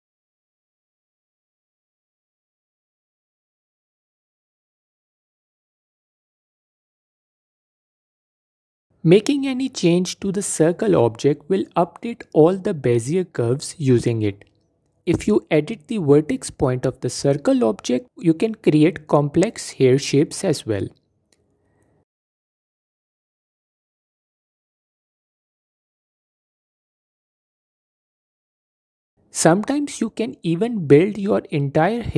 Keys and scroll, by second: 0.2 shift+d, 1.4 shift+d, 2.1 s, 3.4 Tab, 6.5 Tab, 6.7 a, 7.1 alt+s, 8.6 Tab, 12.1 s, 15.9 Tab.